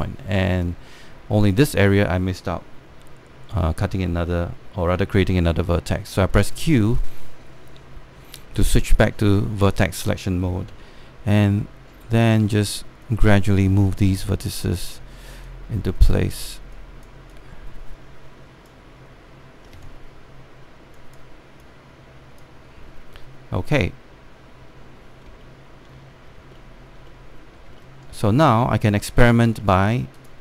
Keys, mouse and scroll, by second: 0.3 Return, 0.9-1.4 scroll down 1, 1.4-3.3 scroll up 1, 5.9 q, 6.0 q, 7.2-10.1 right drag, 10.1 click, 11.4 w, 12.0-17.4 drag, 20.5-21.6 scroll down 1, 21.6-23.3 drag, 23.3-24.6 scroll down 1, 24.6-25.4 scroll up 1, 25.4-26.0 scroll down 1, 26.1 alt+middle click, 26.8 scroll up 1, 27.3 middle click, 27.8 alt+middle click, 28.2 scroll down 1, 28.5 alt+middle click, 29.1 right click, 30.1 space, 30.2 click.